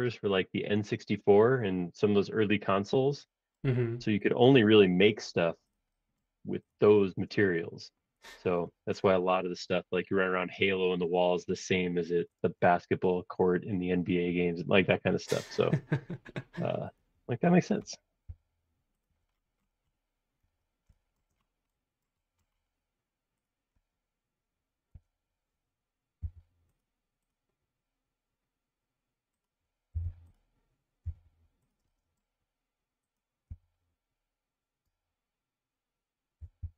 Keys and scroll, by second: 7.0 space, 12.4 space, 18.2 m, 25.0 q, 26.2 Left, 29.9 m, 31.0 Page_Up, 33.5 Left, 34.8 space, 36.1-36.7 typing.